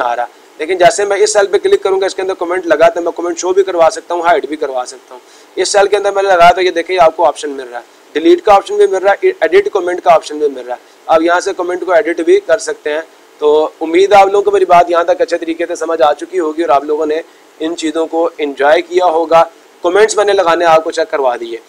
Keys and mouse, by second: 0.9-1.9 drag, 2.5-4.7 drag, 5.1-6.1 drag, 9.3 click, 12.9-13.9 drag.